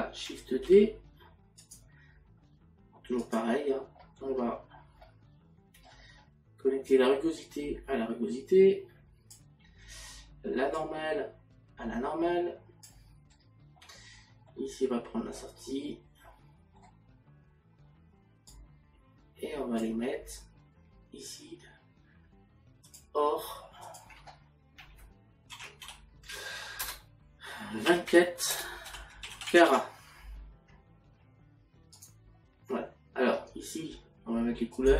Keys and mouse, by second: 3.2 click, 5.0 middle click, 6.9 click, 10.8 click, 15.4 middle click, 24.4 click, 34.8 click.